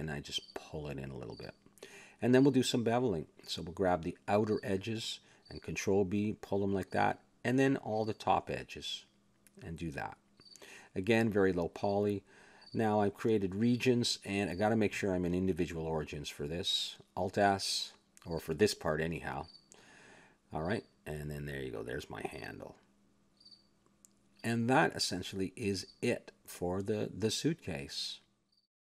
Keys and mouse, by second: 0.8 click, 2.0 a, 2.6 z, 3.1 middle click, 3.6 ctrl+Tab, 4.4-7.0 drag, 6.6 ctrl+b, 7.5 a, 8.0-10.2 drag, 9.8 ctrl+b, 10.7 a, 10.7 click, 11.6 ctrl+r, 12.9 ctrl+b, 13.8 e, 14.9 alt+s, 16.1 click, 16.8 alt+s, 18.3 click, 19.7 s, 21.6 a, 21.8 Tab, 22.2-23.8 middle drag, 22.9 a, 24.5-26.1 middle drag.